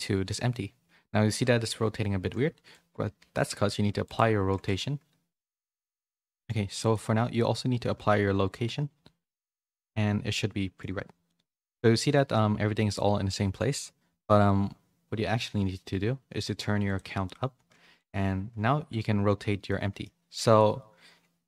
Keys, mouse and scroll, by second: 2.1 ctrl+a, 5.7 ctrl+z, 6.2 middle click, 6.8 click, 7.9 ctrl+a, 9.5-10.7 middle drag, 11.2 middle click, 12.0 shift+middle click, 16.8 click, 19.6 middle click.